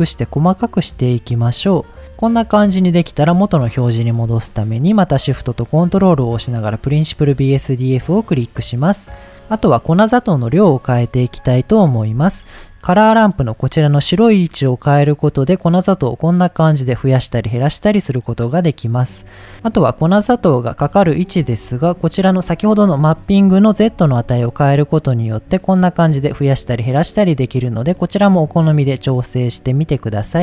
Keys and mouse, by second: 3.3 middle click, 6.9-7.3 middle drag, 7.8 middle click, 8.9 middle drag, 11.3 middle click, 14.1-19.1 drag, 21.5 middle click, 22.0 middle click, 22.5 middle click, 24.2-30.3 shift+drag.